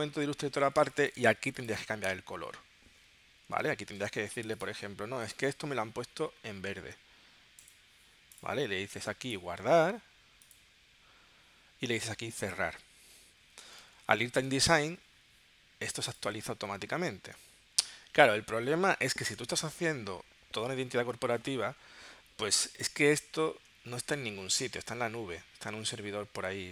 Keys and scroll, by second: 0.8 space, 4.1 shift+super+g, 13.9 super+Tab.